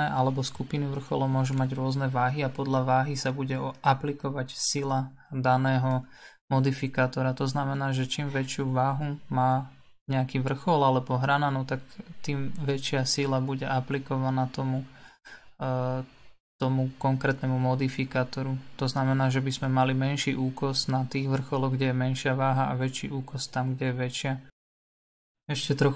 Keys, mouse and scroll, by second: 4.3 click, 6.4-11.2 drag, 12.3-15.4 drag, 18.0-22.4 drag, 25.0-25.9 drag.